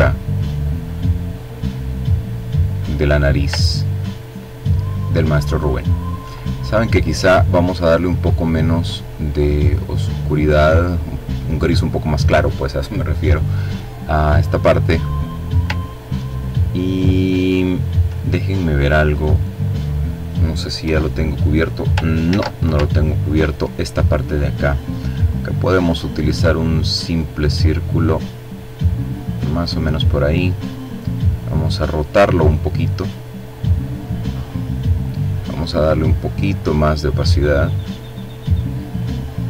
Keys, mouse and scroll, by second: 0.7-2.3 drag, 2.6-3.1 ctrl+scroll down 2, 4.9-5.4 ctrl+scroll up 2, 6.0 click, 8.6-11.1 drag, 14.9-15.4 ctrl+scroll down 2, 15.5-16.9 ctrl+drag, 18.1 click, 18.7 click, 19.8 Delete, 21.3 ctrl+z, 21.9-22.5 scroll up 2, 24.3 click, 25.4-28.7 drag, 29.6 click, 30.6 click, 31.4-32.5 drag, 35.0-36.5 drag.